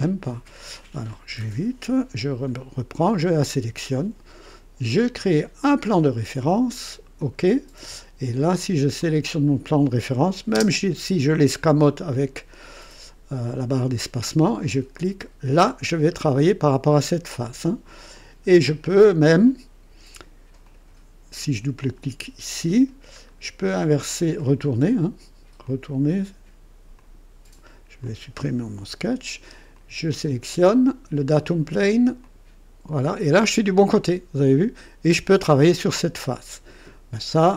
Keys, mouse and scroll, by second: 0.3 click, 1.3 Delete, 3.0 click, 5.6 click, 7.2 click, 8.9 click, 10.5 space, 14.9 click, 16.1 scroll up 2, 18.1 click, 20.6 click, 21.8 click, 23.2-24.4 scroll down 2, 24.4 click, 25.6-26.3 drag, 27.0 click, 28.0 click, 28.8 Delete, 29.7 click, 32.2 click.